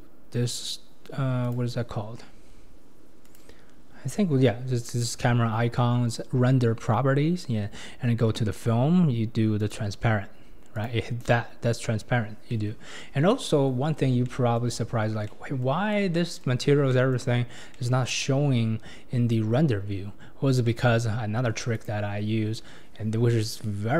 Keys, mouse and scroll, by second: 1.4 click, 2.1-2.6 scroll down 8, 3.2 click, 3.9 scroll down 1, 9.6 click, 10.8 click, 11.8-12.5 scroll up 4, 12.5-12.9 middle drag, 12.9 scroll down 3, 13.3-13.9 middle drag, 13.9-14.3 scroll down 3, 14.3-14.9 shift+middle drag, 14.9-15.3 scroll up 2, 15.3-18.8 middle drag, 18.8-19.7 scroll down 1, 19.7-20.6 scroll down 1, 20.6-21.7 middle drag, 21.7 click, 23.0-23.3 scroll down 1, 23.3-23.9 middle drag.